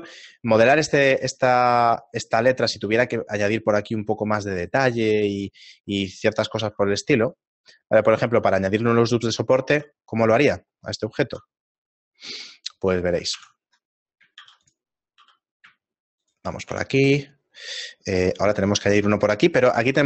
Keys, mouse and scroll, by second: 0.2 g, 1.8 scroll up 6, 2.4 Tab, 3.0 ctrl+r, 4.7 right click, 5.6 middle click, 6.2-6.6 scroll up 2, 6.6 ctrl+Tab, 8.0 right click, 10.0 a, 11.3 KP_Divide, 13.4 ctrl+2, 14.4 ctrl+r, 16.7 a, 17.6 middle click, 18.6 ctrl+r.